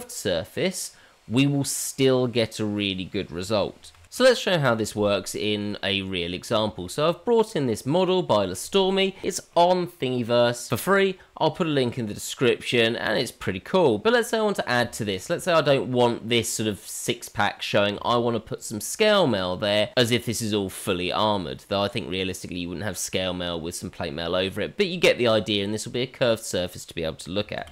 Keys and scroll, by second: 27.6 shift+a.